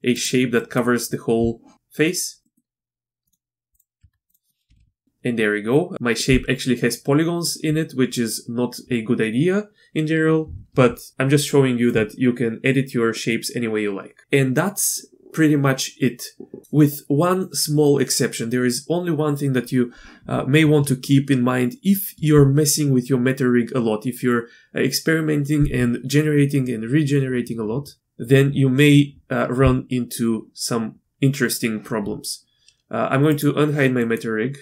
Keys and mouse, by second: 0.1 typing, 0.6 click, 1.7 Tab, 2.4 click, 3.2 click, 3.7 click, 4.0 Tab, 4.7 r, 14.2 Tab, 33.3 click, 34.1 middle click.